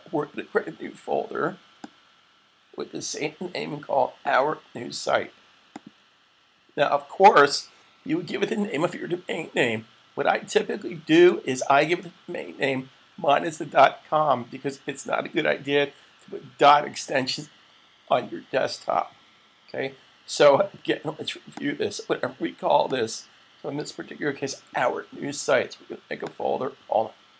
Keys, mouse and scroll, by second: 1.7 click, 5.6 click, 21.5 click, 26.0 click, 27.0-27.3 typing.